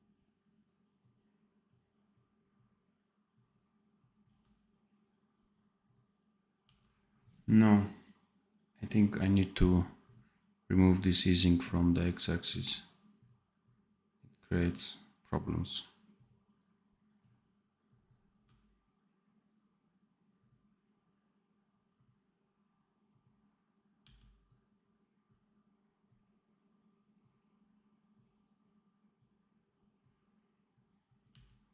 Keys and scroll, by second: 4.2 d, 6.6 d, 18.3 d, 23.9 d, 31.2 d.